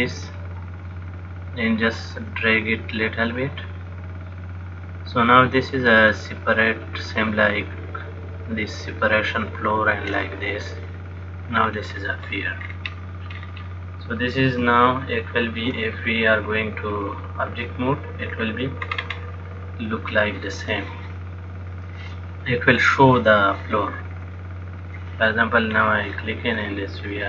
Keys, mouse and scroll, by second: 11.9-12.9 scroll down 6, 12.9-13.6 scroll down 3, 13.6-14.7 scroll down 1, 14.7 scroll down 2, 15.0 shift+middle click, 18.5-19.1 scroll down 1, 19.1 scroll down 2, 20.2 click, 21.9 click, 24.5 click, 26.0-27.2 scroll down 3.